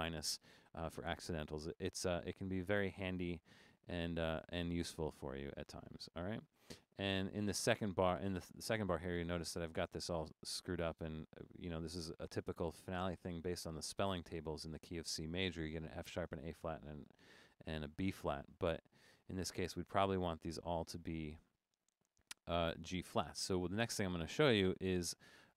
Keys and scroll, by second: 19.2 Down, 19.5 Down, 19.6 Down, 20.0 Down, 20.5 Down, 20.9 Up, 22.0 Down, 22.2 Down, 22.4 Up, 22.6 Up, 22.7 Up, 23.0 Down, 23.2 Down, 23.5 Up, 23.7 Up, 24.0 Down.